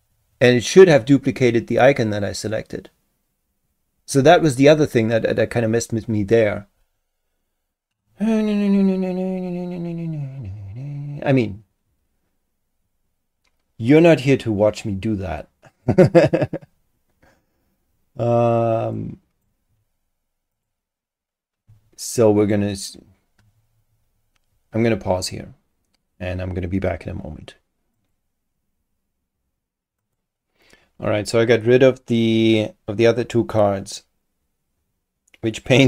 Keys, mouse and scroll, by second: 15.7 click, 18.9 click, 20.5 click, 28.0 click, 30.0 click.